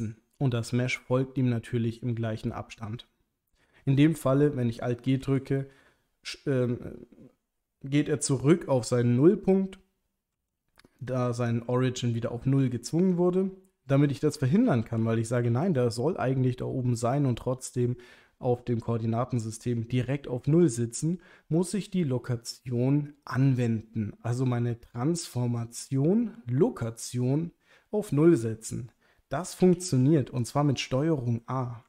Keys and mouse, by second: 5.3 alt+g, 10.3 g, 11.0 click, 12.6 g, 13.0 click, 14.6 ctrl+z, 15.0 ctrl+z, 15.4 ctrl+z, 29.7 g, 29.8 z, 30.4 click.